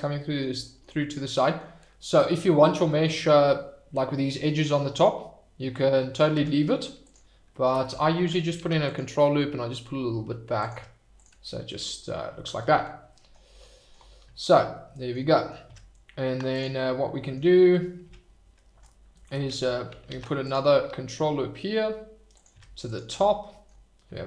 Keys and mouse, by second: 0.2 middle drag, 1.0-1.5 middle drag, 2.0-2.6 middle drag, 6.3 Tab, 8.5 ctrl+r, 10.6 click, 10.7 Tab, 14.4 shift+middle click, 14.8 middle drag, 15.6 Tab, 18.0 Tab, 20.1 ctrl+r, 22.3 click, 22.5 Tab, 23.5 shift+middle click.